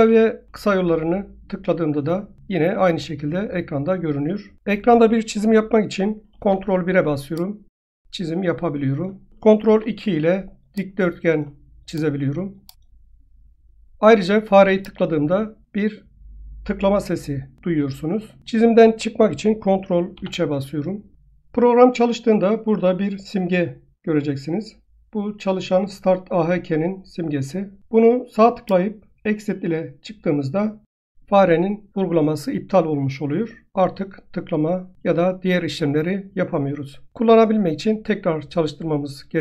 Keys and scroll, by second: 0.5 ctrl+s, 5.6 ctrl+s.